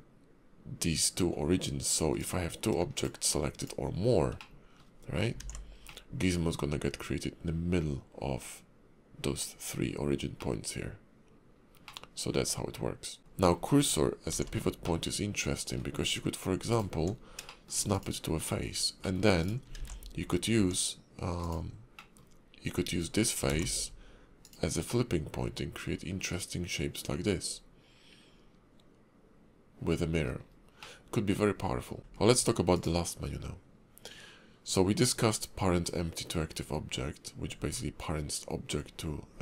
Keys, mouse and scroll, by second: 2.2 click, 2.9 shift+click, 3.6 shift+click, 4.4 middle click, 4.9 scroll down 2, 5.4 alt+x, 5.8 middle click, 10.4 middle click, 11.8 middle click, 13.2 ctrl+z, 13.2 middle click, 13.2 scroll down 4, 14.3 alt+x, 14.8 middle click, 16.1-16.6 scroll up 2, 17.0 Tab, 17.4 shift+middle click, 17.9 click, 18.6-19.0 scroll down 3, 19.0 middle click, 19.4 click, 19.7 alt+x, 20.5 Tab, 21.4 click, 21.9 middle click, 23.5 alt+x, 24.4 click, 24.9 middle click, 30.4-30.8 scroll up 3, 30.8 middle click, 32.2 alt+x, 32.7 click.